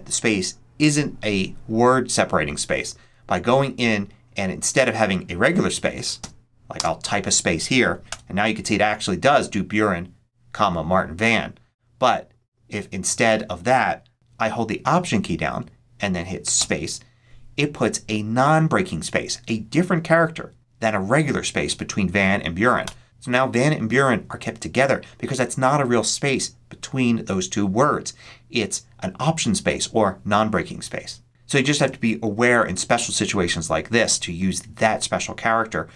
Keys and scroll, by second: 6.6 space, 8.0 Return, 16.5 alt+space, 22.7 Return.